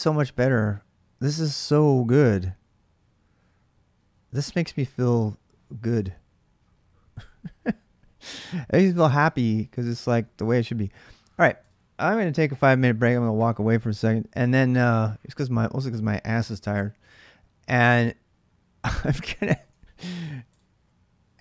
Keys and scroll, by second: 10.0-10.8 typing, 19.5 alt+Tab.